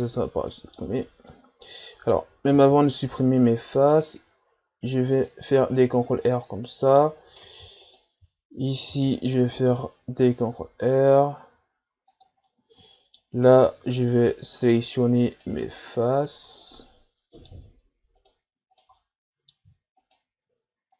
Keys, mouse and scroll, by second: 0.0-2.6 middle drag, 2.6 ctrl+r, 6.2-7.8 middle drag, 7.8-8.9 alt+right drag, 8.9 ctrl+r, 12.5-13.5 middle drag, 13.5 right click, 14.0 ctrl+Tab, 15.3-16.6 right drag, 16.6-18.2 middle drag, 18.2 shift+right click, 19.0-20.0 middle drag, 20.0-20.9 shift+right drag.